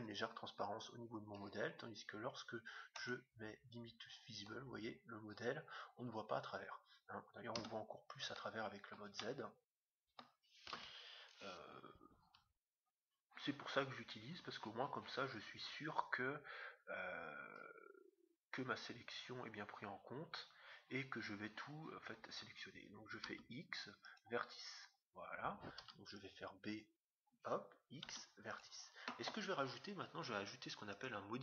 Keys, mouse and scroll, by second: 0.7-1.2 scroll up 1, 1.2-2.5 middle drag, 2.5-2.9 scroll down 1, 2.9-4.6 drag, 4.5 middle click, 5.0-5.8 scroll up 1, 5.8-6.3 scroll up 1, 6.3-6.8 scroll down 1, 7.5 z, 8.2 middle click, 8.6 scroll up 1, 8.7-11.0 middle drag, 10.7 KP_7, 23.2 x, 25.8 b, 28.0 x, 30.9-31.4 drag.